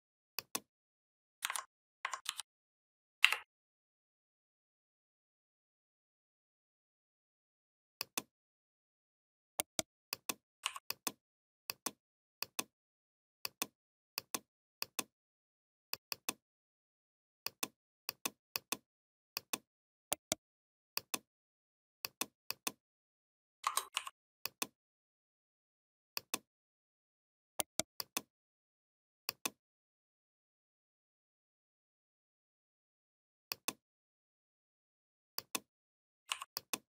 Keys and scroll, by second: 1.2 ctrl+c, 2.1 ctrl+f, 3.0 Up.